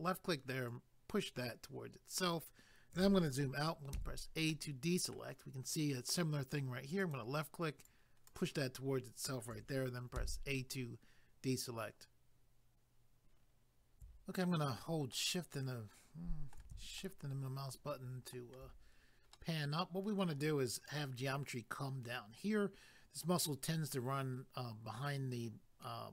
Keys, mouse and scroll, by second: 0.7 click, 2.2-3.4 scroll down 1, 3.9 a, 4.5 middle click, 7.0 click, 7.9 click, 10.1 a, 15.1 shift+middle click, 17.0 shift+middle click, 19.3 middle click.